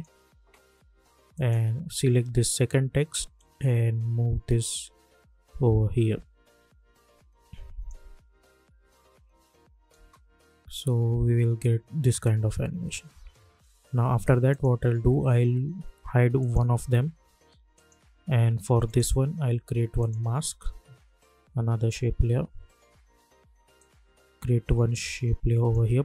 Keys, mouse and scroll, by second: 9.9 space, 13.2 space, 13.4 j, 14.5 click, 23.7-26.0 drag.